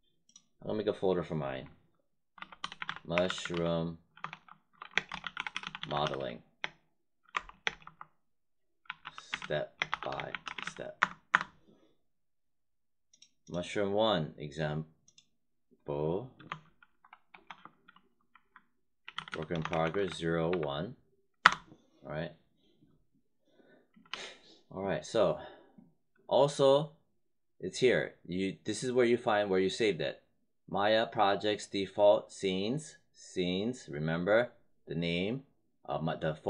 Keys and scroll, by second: 2.0-7.5 typing, 8.7-11.0 typing, 17.2 shift+-, 18.8-20.4 typing, 21.3 Return, 24.0 w.